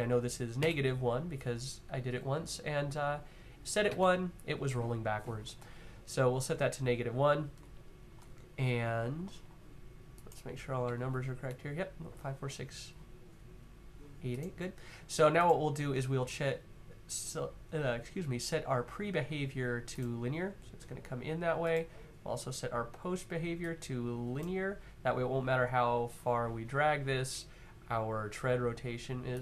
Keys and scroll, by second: 0.0-0.4 typing, 3.6 Tab, 6.5 Tab, 10.7 Left, 11.0 Left.